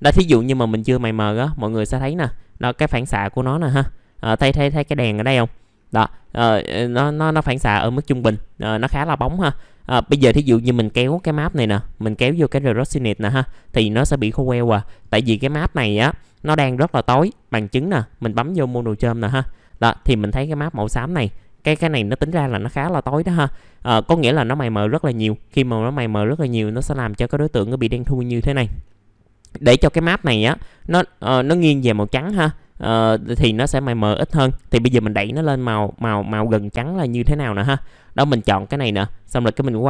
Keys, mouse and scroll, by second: 0.3 Delete, 1.2 middle click, 1.6-2.0 scroll up 1, 4.0 middle click, 5.5-6.2 scroll down 1, 6.2 middle click, 10.8-13.4 drag, 13.4 click, 14.8 middle click, 15.3-16.4 drag, 16.4 click, 19.7 middle click, 30.3 click, 32.1 middle click, 32.3-33.4 scroll down 1, 33.4 middle click, 39.7 click.